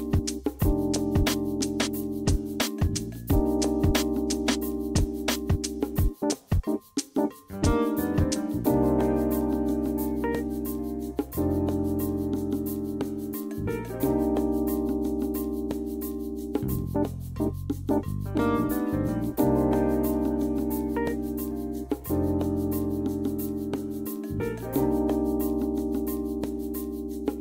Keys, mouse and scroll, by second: 10.1 shift+click, 10.9 KP_5, 11.1 Return, 12.7 q, 14.1 e, 16.2 q, 18.6 click, 19.6 KP_2, 19.7 Return, 20.7 q, 23.7 e.